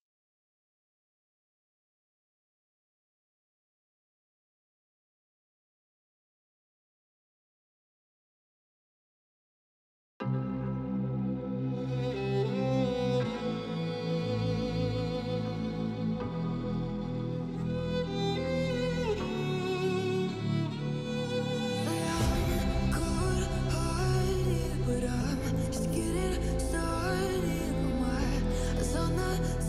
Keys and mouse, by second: 1.0-2.3 drag, 3.0-4.5 drag, 5.0 click, 5.6 click, 5.8 shift+d, 7.3 middle click, 8.1 click, 8.9 click, 9.3 shift+a, 11.3 click, 12.4 click, 14.1 shift+middle click, 14.5 click, 15.0 shift+click, 15.8 shift+click, 17.6-19.6 drag, 20.4 click, 21.3 click, 21.7 click, 23.3-24.4 drag, 25.4 click, 25.9 shift+middle click, 27.2 click, 28.8 click, 29.5 ctrl+s.